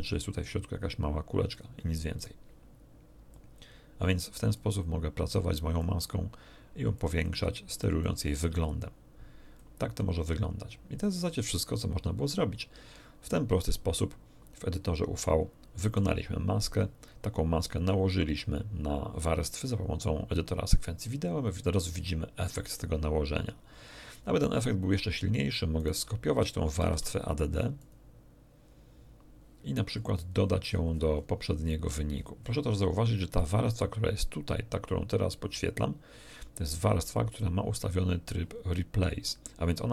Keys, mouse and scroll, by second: 1.5 click, 2.1 right click, 3.3 click, 4.5 click, 5.8 click, 6.9 click, 8.0 click, 8.8 click, 11.0 click, 13.8 scroll down 2, 14.4 scroll up 2, 15.2 middle click, 21.9 middle click, 25.8 right click, 26.8 shift+d, 27.8 click, 29.9-32.6 scroll up 2, 33.4-38.4 drag.